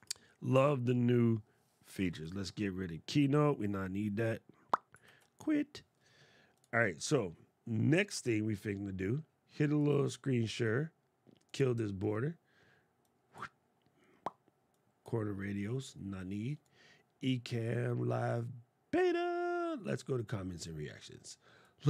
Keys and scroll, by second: 4.8 super+q.